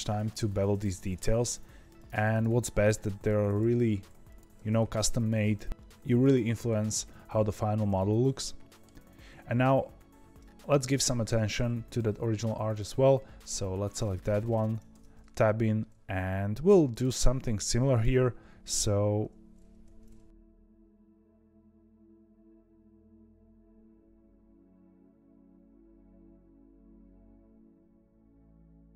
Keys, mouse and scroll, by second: 0.6 click, 1.0 ctrl+b, 2.2 click, 2.7 g, 4.2 click, 4.5 ctrl+b, 7.9-8.9 middle drag, 8.9-9.6 scroll down 2, 9.8-11.2 scroll up 1, 11.2 Tab, 13.3 click, 16.8 click, 17.6 2, 17.8 click, 18.6 v, 20.5 ctrl+z, 20.7 click, 21.2 z, 21.9 ctrl+r, 22.8 ctrl+r, 23.5 1, 23.5 click, 23.8 click, 24.0 ctrl+b, 24.5 ctrl+t, 24.7 click, 24.8 z, 26.1 click, 26.3 ctrl+b, 27.0 1, 27.1 click, 27.2 g, 28.1 ctrl+z, 28.2 click, 28.3 middle click, 28.4 g.